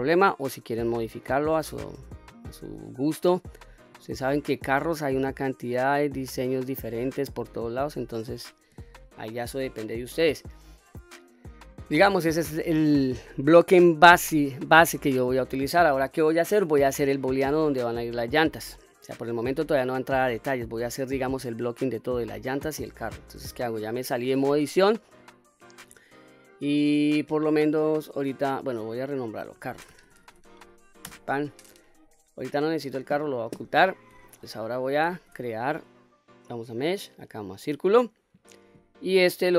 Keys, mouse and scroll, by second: 1.2 middle click, 2.2-3.7 scroll down 1, 3.9 q, 4.4-8.2 middle drag, 8.7 Tab, 9.2-9.9 middle drag, 10.4-12.0 middle drag, 15.5-16.0 middle drag, 17.0-17.4 middle drag, 20.5-20.8 scroll up 1, 20.8-21.1 scroll down 2, 22.1-25.1 scroll up 2, 25.1-26.0 middle drag, 28.8 click, 28.9-31.9 drag, 30.3 r, 32.8 click, 35.0 shift+a.